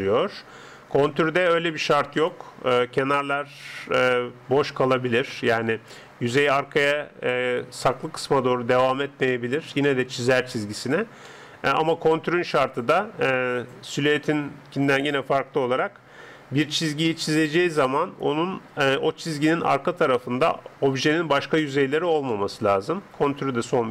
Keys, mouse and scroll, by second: 0.0-1.7 middle drag, 0.0 d, 1.7-4.0 drag, 11.3-13.0 middle drag, 13.0 scroll up 1, 13.3-16.4 middle drag, 22.3-23.9 middle drag.